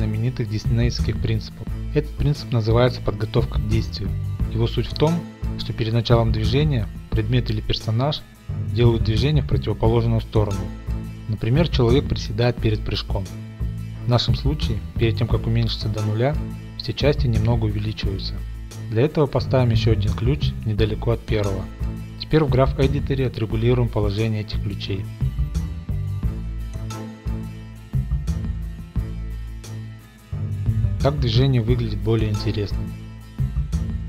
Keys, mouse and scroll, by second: 22.4 click, 23.2-23.8 scroll, 24.1-24.5 scroll, 24.8 click, 25.2-27.2 typing, 25.9 click, 26.1 click, 26.9-27.4 drag, 27.5 click, 27.6 middle click, 27.6-28.7 scroll up 11, 28.1 click, 28.4-28.7 middle drag, 28.7 click, 28.8 g, 28.9 y, 29.3-29.9 drag, 29.7 g, 30.2-31.3 drag.